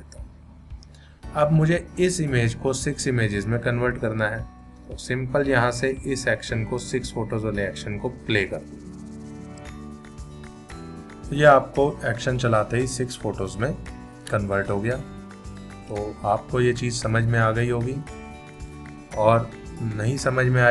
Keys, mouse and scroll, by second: 6.8 click, 9.6 v.